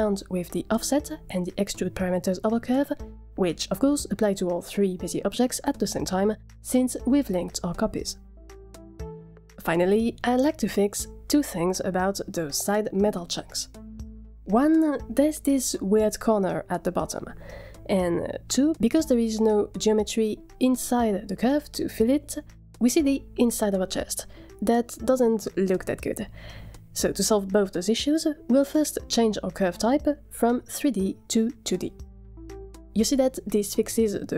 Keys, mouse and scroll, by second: 0.5-3.8 drag, 4.8 click, 6.5 click, 7.2-10.0 middle drag, 15.2 scroll up 4, 15.6 shift+middle click, 18.5 scroll down 5, 18.9 shift+middle drag, 19.2 scroll up 1, 19.5 shift+middle drag, 30.1 click.